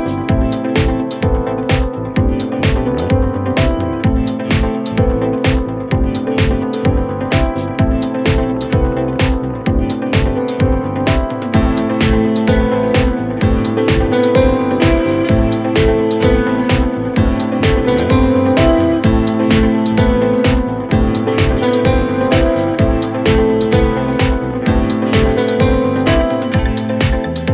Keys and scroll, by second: 9.3 Delete, 15.0 F3, 23.7 F3, 26.1 b, 27.3 l.